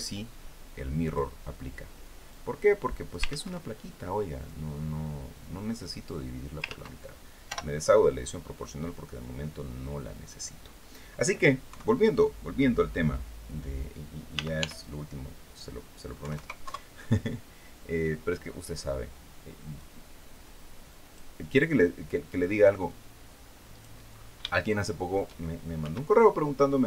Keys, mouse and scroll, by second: 0.7 click, 2.0-3.0 drag, 2.9 ctrl+z, 4.1-6.4 drag, 6.3 ctrl+z, 7.1 o, 8.3-10.1 drag, 11.3 KP_3, 14.0 r, 14.2 y, 15.9 KP_9, 16.0 KP_0, 16.3 KP_Enter, 19.4-21.0 drag, 22.1-23.7 drag, 23.8-24.1 scroll up 2, 24.2 shift+click, 25.4 s.